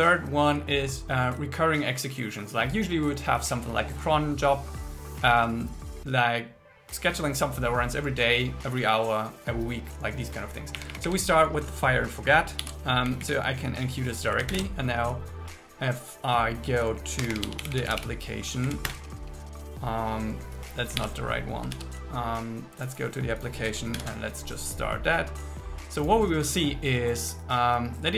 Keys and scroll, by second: 10.8 Up, 12.6 super+s, 13.1 Down, 14.6 ctrl+shift+r, 19.4 Return, 21.0 super+w, 21.8 super+1, 24.0 ctrl+shift+r.